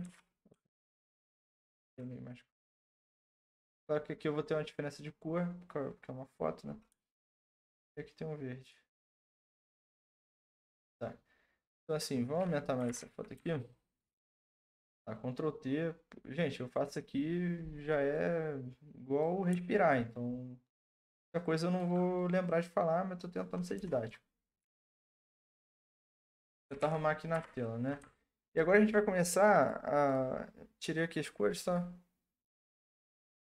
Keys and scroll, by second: 0.0 ctrl+z, 12.9 ctrl+t, 23.7 Return, 24.6 Left, 25.0 Left, 25.3 Left, 26.6 Left, 26.8 Left, 27.3 Right.